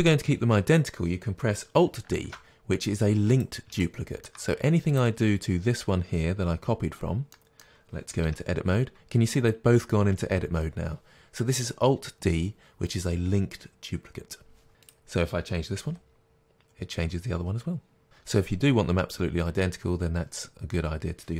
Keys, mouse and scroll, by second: 2.2 alt+d, 3.5 click, 3.9-5.0 shift+middle drag, 5.0 click, 7.4-15.0 middle drag, 8.3 Tab, 15.0 click, 15.9 g, 18.0 click.